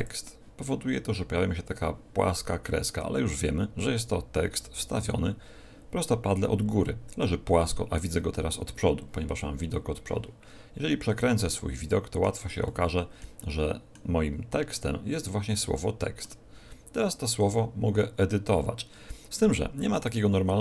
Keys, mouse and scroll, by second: 11.0 middle click, 12.6 middle click, 13.3 middle click, 14.2 scroll up 5, 14.9-15.3 scroll up 3, 15.6 shift+middle click, 17.2 KP_7, 19.9 right click.